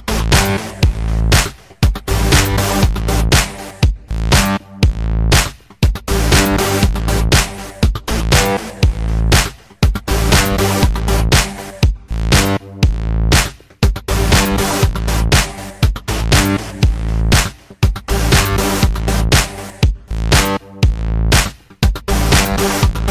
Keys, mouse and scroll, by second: 0.2 alt+right click, 0.6 alt+click, 0.8 alt+middle click, 1.1-2.3 drag, 2.3 g, 2.6 click, 3.0 f, 3.1 click, 3.7 ctrl+z, 3.8 click, 4.1 ctrl+z, 4.2 click, 4.5 alt+right click, 4.7-5.7 alt+drag, 5.7 f, 5.9 click, 6.2 f, 6.3 click, 6.5 ctrl+z, 6.8-9.1 drag, 9.1 f, 9.2 alt+click, 10.1 alt+right click, 10.2 alt+click, 10.4 alt+right click, 10.6 p, 10.8 alt+right click, 10.9 alt+click, 11.6 alt+middle click, 11.9 alt+click, 12.0 alt+right click, 12.1 alt+click, 12.4 f, 12.6 click, 13.0 right click, 13.5 alt+middle click, 13.6 alt+click, 13.8 alt+right click, 14.3 alt+middle click, 15.2-16.1 typing, 15.5 click, 15.9 click, 16.3-17.6 drag, 17.6 p, 18.1-21.2 drag, 21.2 alt+right click, 21.3 alt+middle click, 21.4 alt+right click, 21.5 alt+click, 21.7 alt+right click, 21.8 g, 21.9 alt+click, 22.0 f, 22.2-23.1 drag.